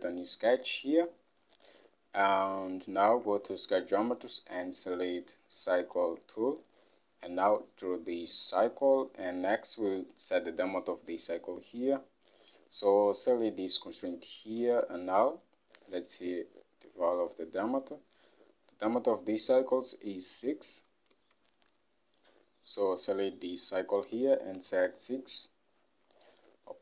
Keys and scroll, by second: 14.8 ctrl+Tab, 21.3 ctrl+Tab, 24.7 typing, 25.2 Return.